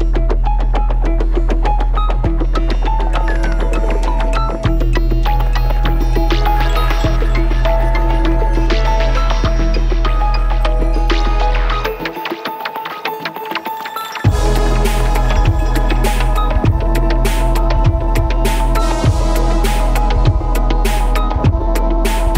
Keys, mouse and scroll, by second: 0.1 click, 0.3 middle click, 0.9 alt+click, 1.3 BackSpace, 1.5 click, 1.5 BackSpace, 1.6 middle click, 1.6-3.0 right drag, 2.0 middle click, 2.1 g, 2.9 click, 3.1 middle click, 3.1 right click, 4.7-6.3 right drag, 5.0 click, 5.0 middle click, 5.5 g, 5.7 s, 6.1 middle click, 6.1 r, 6.4 click, 6.7 g, 6.7-8.4 middle drag, 7.1 click, 7.8 s, 8.0 g, 8.4 click, 8.5 middle click, 8.7 click, 9.4 middle click, 9.7 click, 9.8 middle click, 10.0 click, 10.1-11.3 middle drag, 12.0 click, 12.2 middle click, 12.4 alt+click.